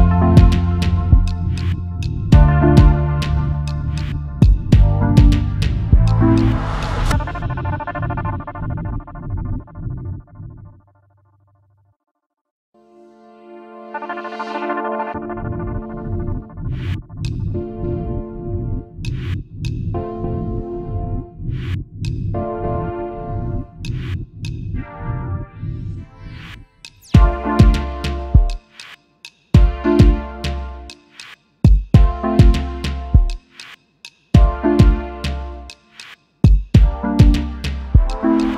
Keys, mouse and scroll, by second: 5.7 double click, 7.2 ctrl+x, 7.5 ctrl+f, 11.5 ctrl+x, 11.8 ctrl+f, 15.4 ctrl+x, 15.7 ctrl+f, 16.8 double click, 26.9-28.0 typing, 30.4 double click, 32.9-34.2 typing.